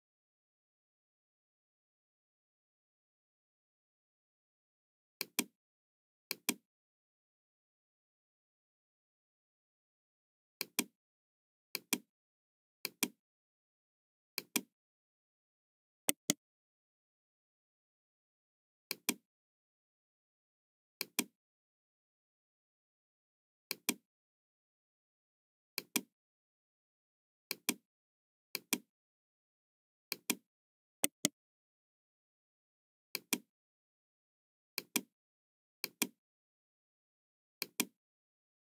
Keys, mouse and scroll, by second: 0.0-3.0 middle drag, 5.2 click, 6.2 click, 8.2-8.6 scroll up 1, 8.7-9.0 scroll down 1, 10.5 click, 11.8 click, 12.8 click, 14.2 click, 16.0 right click, 18.8 click, 21.0 click, 23.6 click, 25.7 click, 27.4 click, 28.5 click, 30.0 click, 30.9 right click, 33.1 click, 34.7 click, 35.7 click, 37.5 click.